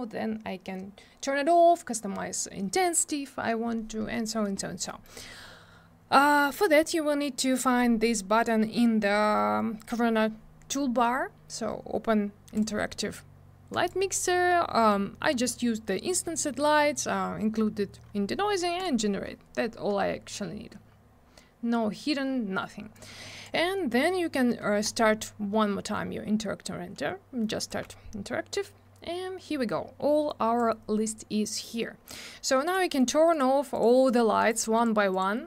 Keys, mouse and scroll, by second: 4.9 middle click, 5.0 middle click, 12.5 click, 13.7 click, 18.8 click, 22.9 click, 24.8 click, 30.3 click, 32.6 click, 32.7 click, 33.0 click, 33.0 double click, 33.3 click, 33.4 click, 33.7 click, 33.8 double click, 34.1 click, 34.1 click, 34.4 click, 34.5 double click, 34.8 click, 34.8 click, 35.1 click, 35.2 double click, 35.4 click.